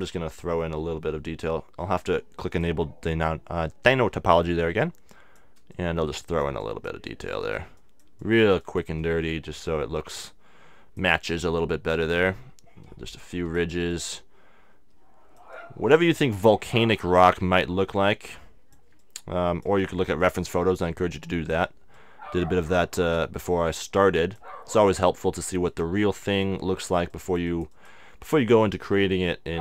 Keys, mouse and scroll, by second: 0.3-1.4 right drag, 1.7 middle click, 2.4-4.4 drag, 4.7-13.0 drag, 13.9-17.4 drag, 18.0-29.6 drag, 29.1-29.6 middle drag.